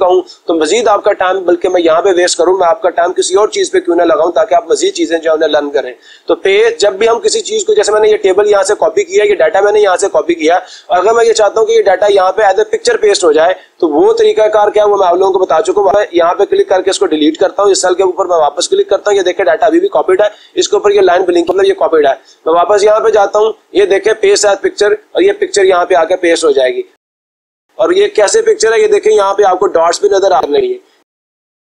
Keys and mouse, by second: 15.7 Delete, 18.8-20.0 drag, 23.6-24.7 drag, 27.5-28.6 drag, 31.5 click.